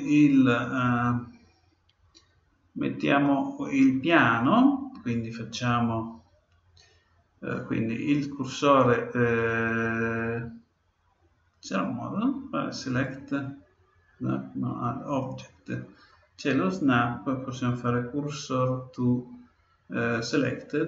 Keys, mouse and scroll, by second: 12.9-14.7 drag, 15.0-16.8 drag, 16.8 click.